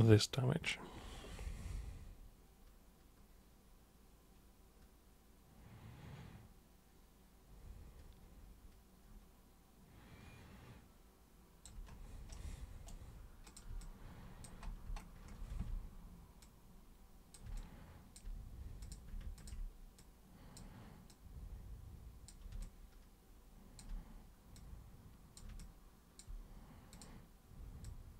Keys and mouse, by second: 12.3 super+right click, 13.5 super+click, 13.8 alt+super+click, 15.5 super+w, 16.4-17.3 super+drag, 17.6-18.2 alt+super+drag, 18.8 super+click, 19.4 ctrl+shift+super+click, 20.0-20.6 super+drag, 21.1 super+click, 22.6-23.8 alt+super+drag, 24.6 super+click, 25.6-26.2 alt+super+drag, 26.9 super+click, 27.9 super+click.